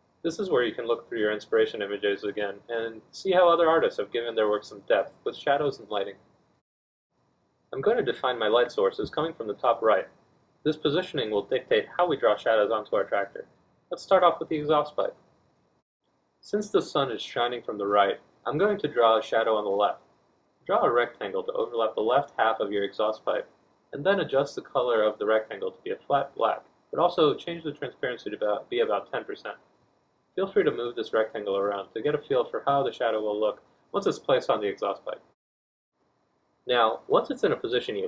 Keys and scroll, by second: 12.4 b, 12.8 Return, 14.0 F1, 19.5 r, 34.3 F1.